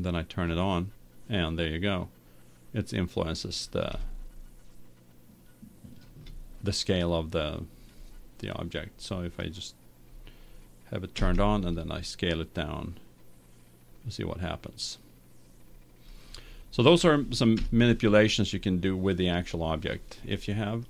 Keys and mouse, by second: 0.7-2.7 drag, 2.6-6.5 middle drag, 7.0-9.5 middle drag, 9.5-11.2 right drag, 11.2 s, 17.6 KP_1.